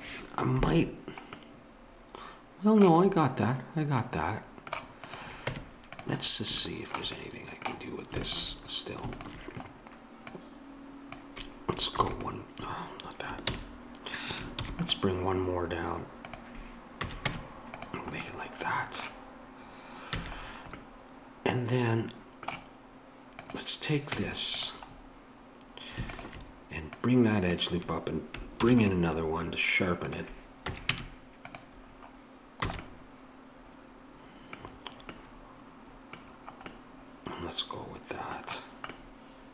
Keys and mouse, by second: 5.0 click, 5.4 Tab, 8.3 click, 11.1 alt+shift+super+click, 12.0 ctrl+e, 13.5 ctrl+z, 14.6 ctrl+r, 17.0 a, 17.3 Tab, 20.1 a, 23.4 click, 24.1 Tab, 27.4-28.6 drag, 28.6 ctrl+r, 30.6 a, 30.9 Tab, 32.7 a.